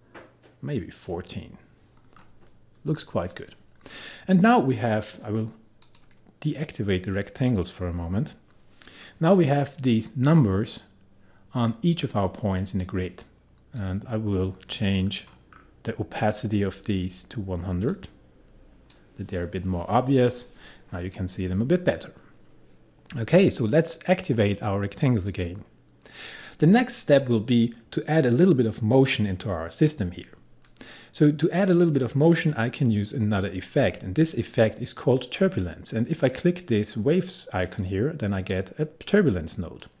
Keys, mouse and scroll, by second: 2.0-3.8 scroll up 1, 3.8-5.5 scroll down 1, 5.8 click, 8.5-9.1 scroll up 1, 11.0-11.3 scroll down 1, 13.8 click, 15.0-18.0 scroll down 1, 18.0-21.5 drag, 22.2-23.7 scroll down 1, 23.7 click, 37.7-40.0 drag.